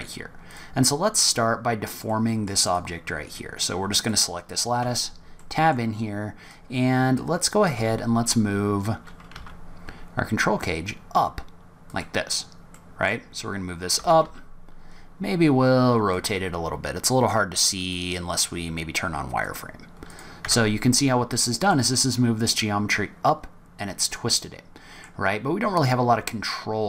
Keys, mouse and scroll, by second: 0.0 scroll up 1, 0.4 click, 1.2 click, 2.0 middle click, 2.6 click, 3.9 click, 4.8 Tab, 5.3 middle click, 6.4 click, 7.7 g, 12.3-12.6 scroll down 2, 12.6 middle click, 13.9 r, 17.7 click, 20.0 click, 20.4 Tab, 20.9-21.3 scroll up 3, 21.3 middle click, 23.6-23.9 scroll down 3, 24.1 scroll up 1, 24.3 middle click.